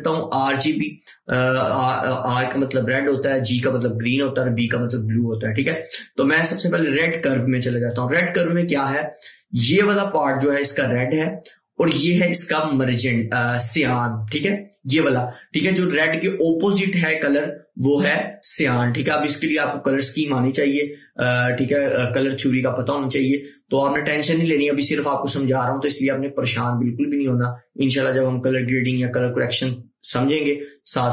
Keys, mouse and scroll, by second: 7.1 click.